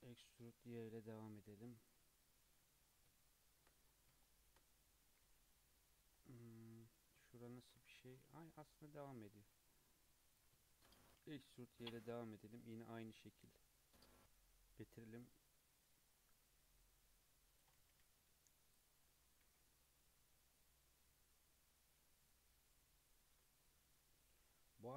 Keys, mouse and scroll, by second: 2.4 click, 2.9-3.4 scroll down 3, 3.6-4.2 shift+scroll down 5, 4.2 shift+middle click, 4.7 scroll down 1, 4.8-5.2 scroll up 1, 5.2 alt+z, 5.5-8.5 middle drag, 8.5 KP_3, 8.7-9.4 scroll up 3, 9.4 alt+z, 9.7 click, 10.7 shift+middle drag, 11.0 e, 15.2-16.4 drag, 17.8 g, 19.1 Tab, 19.5 alt+z, 19.8 scroll down 1, 19.8-22.0 middle drag, 22.0-22.3 scroll down 2, 22.3-23.4 middle drag, 23.4 Tab, 23.6-24.1 middle drag, 24.1 Tab, 24.4-24.9 scroll down 2.